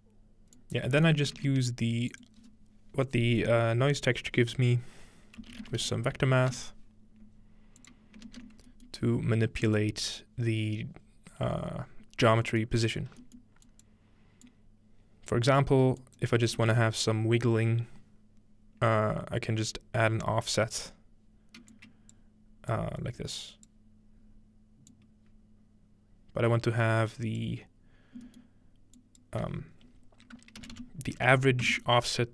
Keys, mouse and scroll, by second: 0.6 click, 1.4 shift+a, 2.2 shift+click, 2.6-5.2 drag, 5.3-6.9 typing, 7.8-9.7 drag, 8.6 scroll down 2, 8.8-11.4 middle drag, 9.1 scroll up 2, 9.8 scroll up 1, 11.9 scroll down 1, 12.5 middle click, 13.4 scroll down 1, 13.7 click, 14.5-15.5 drag, 16.0 click, 21.7-30.3 drag, 24.3-24.9 scroll up 1, 24.9-26.6 scroll up 1, 28.5 middle click, 31.6 Return.